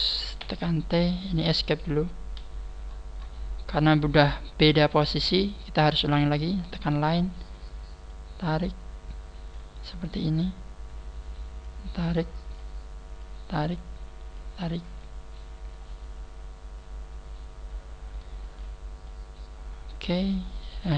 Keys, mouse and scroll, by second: 0.4 t, 1.4 t, 2.8 scroll down 3, 6.6 click, 9.8-10.9 scroll down 9, 12.5 scroll down 1, 15.7-17.2 scroll up 1, 19.0 shift+middle click, 19.1 shift+middle click.